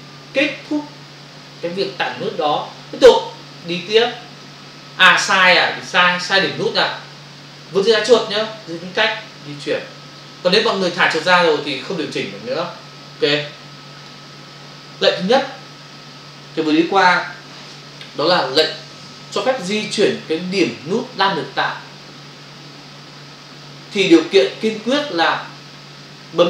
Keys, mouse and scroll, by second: 3.1 click, 9.1 space, 13.3 click.